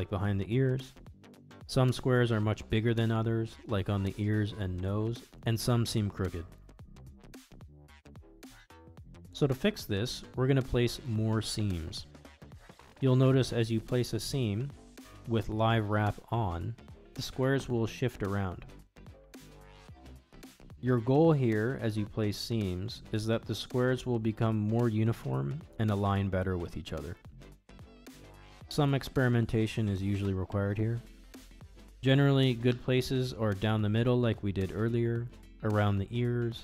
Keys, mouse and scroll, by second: 0.1-2.2 middle drag, 2.5 middle click, 4.0 alt+click, 5.5 alt+click, 6.7 middle click, 8.0 middle click, 9.6-11.6 middle drag, 12.5 alt+shift+click, 13.0-14.4 middle drag, 17.2 middle click, 18.5 ctrl+e, 25.9 shift+click, 26.4 shift+click, 26.7 shift+click, 27.4-29.3 middle drag, 30.1 middle click, 32.4 shift+click, 33.1-34.1 middle drag, 34.7 shift+click, 35.5 shift+click, 35.9 shift+click.